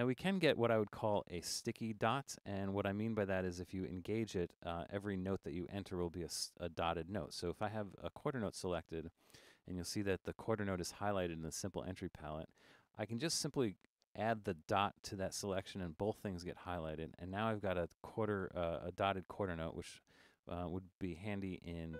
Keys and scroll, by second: 0.3-1.0 typing, 7.2 5.